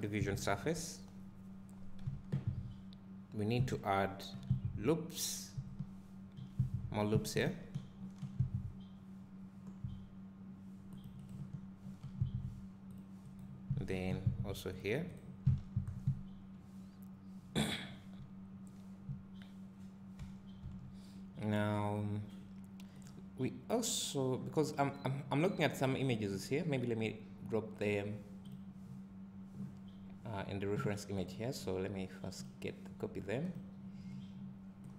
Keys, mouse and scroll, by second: 0.6-2.1 scroll up 2, 2.1 Tab, 4.4-14.2 drag, 7.9 ctrl+r, 11.3 right click, 11.8 ctrl+r, 15.2 right click, 15.5 Tab, 15.9 scroll down 1, 16.1 `, 20.2 Tab, 20.6 Tab.